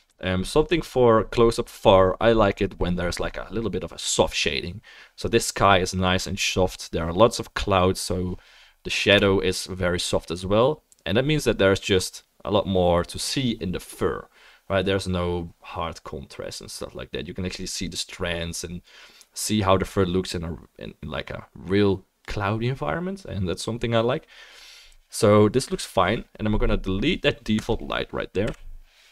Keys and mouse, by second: 9.2 KP_Add, 27.6 click, 28.5 Delete.